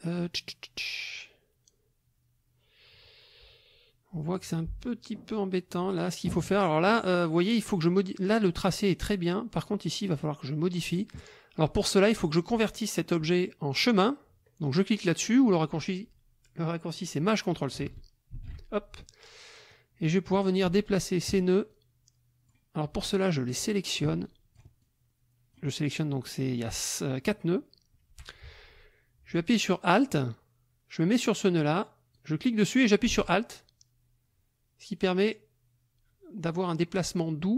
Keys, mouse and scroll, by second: 1.1-6.5 drag, 18.3 ctrl+shift+c, 19.7 click, 20.7 shift+click, 21.7 shift+click, 23.3 shift+click, 24.2 shift+click, 24.8 shift+click, 32.2-37.5 drag.